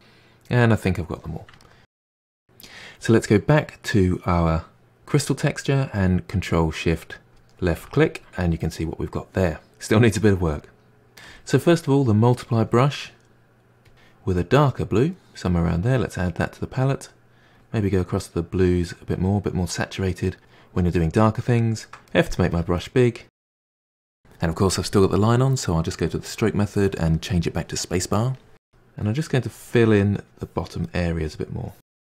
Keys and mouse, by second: 0.5-0.9 drag, 0.9-1.2 middle drag, 1.2-1.6 drag, 1.6-2.4 middle drag, 7.3 click, 8.0 ctrl+shift+click, 8.3-9.7 middle drag, 12.5-18.2 drag, 18.8-20.7 drag, 21.5 click, 22.1 f, 23.1 middle drag, 23.4-25.3 drag, 25.3 ctrl+z, 25.9-28.4 drag, 29.5-30.9 drag, 30.9-31.6 middle drag, 31.6-32.0 drag.